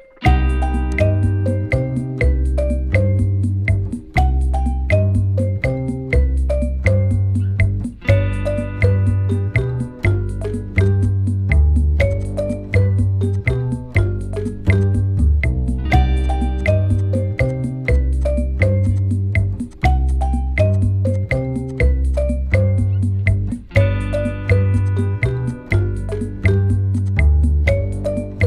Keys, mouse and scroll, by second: 4.2 alt+scroll down 1, 5.9-7.3 scroll up 1, 11.0 double click, 11.3 alt+scroll down 1, 12.1 double click, 13.9 right click, 14.7 shift+click, 16.6 double click, 18.9 ctrl+click, 24.8 double click, 27.0 double click, 27.5-28.4 typing.